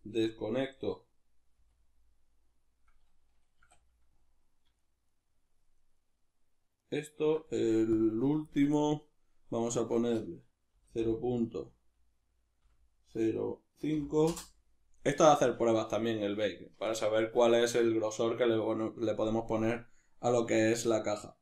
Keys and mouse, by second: 4.8 shift+right click, 5.1 shift+right click, 5.8 shift+right click, 6.0 shift+right click, 6.8 shift+right click, 8.0 click, 9.7-21.4 drag.